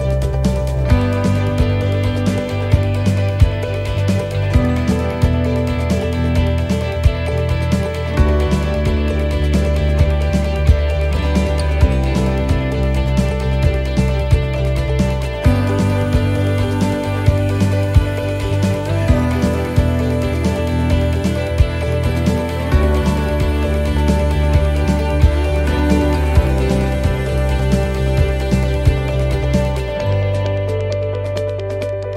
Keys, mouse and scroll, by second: 5.7-6.4 scroll down 6, 6.4 middle click, 9.6-10.1 scroll down 2, 10.3 middle click, 12.5 right click, 13.6 shift+middle click, 14.5-15.0 scroll down 5, 15.1 shift+middle click, 17.9 scroll up 4, 18.4 shift+middle click, 19.1 scroll up 2, 19.6 shift+middle click, 19.9-20.4 scroll up 4, 20.3 shift+middle click, 21.4 middle click, 23.7 click, 26.1-27.7 scroll down 15, 27.7-28.2 scroll up 11, 28.4-30.0 scroll down 12, 30.9 click.